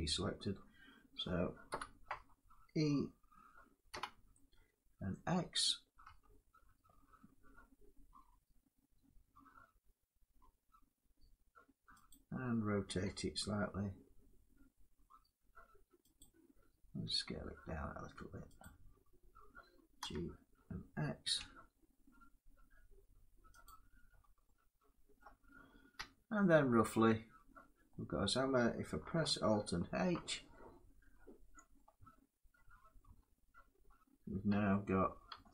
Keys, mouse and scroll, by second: 0.8 middle click, 1.1 scroll, 1.4 7, 3.7 e, 5.8 x, 11.8 click, 12.7 r, 15.9 click, 16.7 s, 18.3 click, 19.7 g, 21.1 x, 23.3 click, 23.8-24.1 scroll down 3, 24.9 middle click, 25.6 Tab, 27.5 scroll, 27.9 middle click, 29.6 alt+h, 30.2-30.6 scroll up 2, 31.0 scroll up 1, 31.4 middle click, 32.7 middle click, 32.8 Caps_Lock, 33.5 middle click, 34.2 Tab, 34.4 scroll down 1, 35.1 Tab.